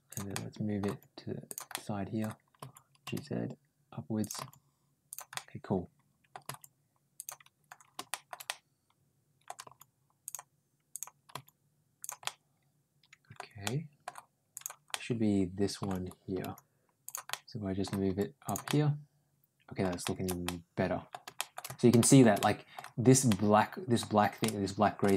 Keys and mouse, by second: 0.1 middle click, 0.7 ctrl+g, 1.5 middle click, 2.4 ctrl+g, 4.2 g, 5.2 middle click, 6.3 g, 7.9 middle click, 8.3-9.3 middle drag, 9.5 g, 10.7 click, 11.1 g, 12.1-13.2 middle drag, 13.4 middle click, 14.4 click, 14.7 middle click, 16.3 g, 17.1 middle click, 17.9 g, 18.5-19.6 middle drag, 19.9 middle click, 20.3 middle click, 21.2 middle click, 21.9 shift+middle click, 22.2 middle click, 23.1 middle click, 24.2 shift+middle click, 25.0 middle click.